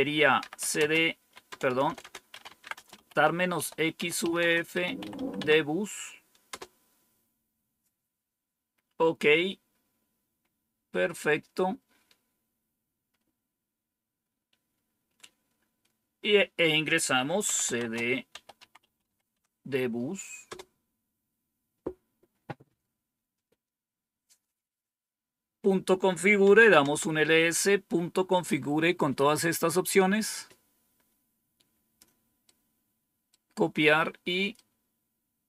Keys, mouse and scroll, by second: 0.1-6.9 typing, 11.7-12.4 scroll down 1, 14.5-15.3 scroll down 1, 17.2-19.5 typing, 20.4 Return, 26.2-27.0 typing, 30.3-32.0 drag, 32.4 right click, 34.5-35.4 right drag.